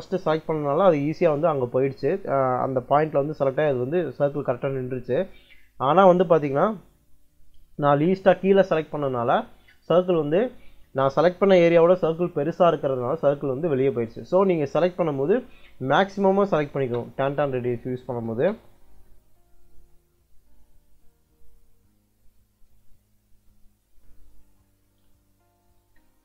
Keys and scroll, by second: 16.4 c, 16.7 space, 18.2 space, 25.4-26.2 typing.